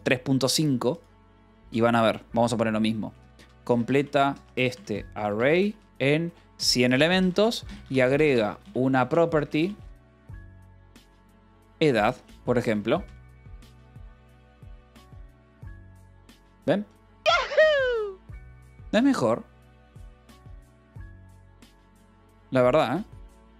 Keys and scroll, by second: 3.0-12.4 typing, 13.3 Return.